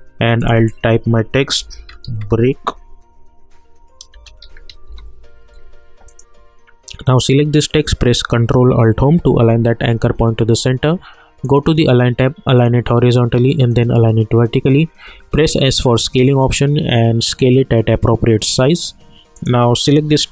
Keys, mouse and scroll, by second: 0.4 click, 1.3-2.5 typing, 4.2-5.3 typing, 6.1 click, 9.2 ctrl+alt+Home, 11.4 click, 15.1 s, 16.0-19.3 drag.